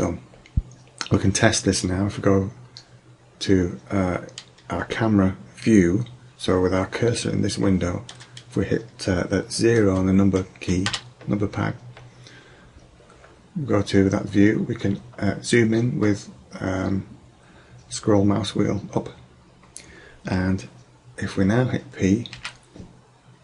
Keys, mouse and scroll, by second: 11.0 KP_0, 15.1-17.4 middle drag, 22.3 p.